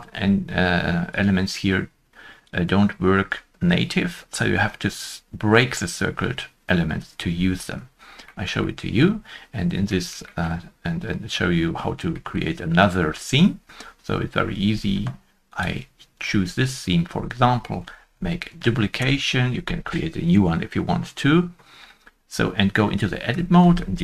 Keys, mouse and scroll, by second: 8.2 middle click, 8.6 scroll up 1, 8.6 shift+middle click, 9.8 shift+middle click, 10.2 shift+middle click, 12.1 shift+middle click, 18.1 shift+middle click, 18.4 shift+d, 18.9 Return, 23.2 shift+middle click, 23.2 shift+d.